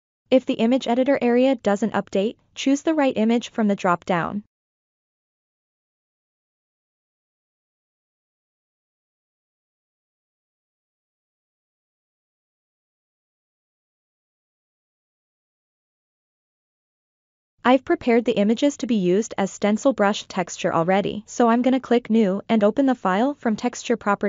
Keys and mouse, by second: 2.1 click, 5.2-6.7 drag, 7.4 click, 9.8 click, 13.5 click, 14.6 click, 15.8 click, 16.6 middle click, 20.9 click.